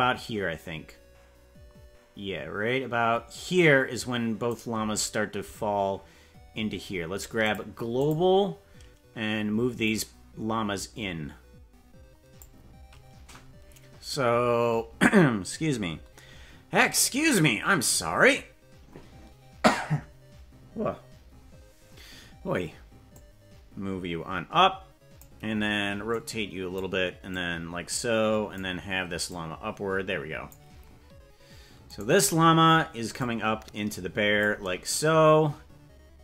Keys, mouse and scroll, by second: 2.0-4.5 drag, 7.4 click, 9.8-12.4 drag, 13.0-13.6 scroll up 8, 14.4 scroll down 2, 17.9 right click, 23.0-25.2 drag, 26.0 click, 27.2-28.5 drag, 29.3-30.5 drag, 32.1 right click, 33.1-34.4 drag.